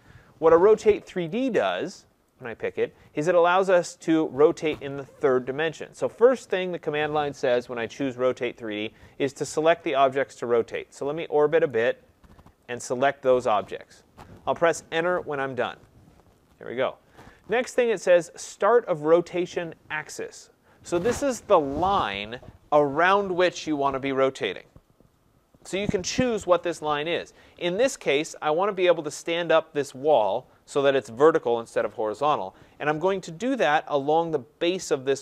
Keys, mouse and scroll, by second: 1.3 click, 2.4 click, 11.7 right click, 13.2 click, 15.7 Return, 27.8 middle click, 27.9 middle click, 29.3 right click.